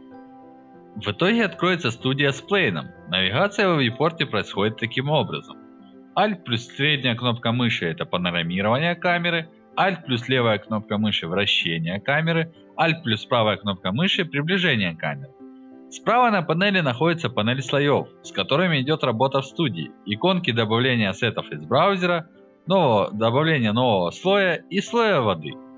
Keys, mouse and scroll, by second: 0.2-1.5 alt+drag, 1.7 alt+middle click, 2.0 alt+click, 2.3 alt+middle drag, 4.8-7.1 alt+middle drag, 7.7-10.3 alt+drag, 11.4-13.2 alt+right drag, 13.5-14.1 alt+middle drag, 16.5 click.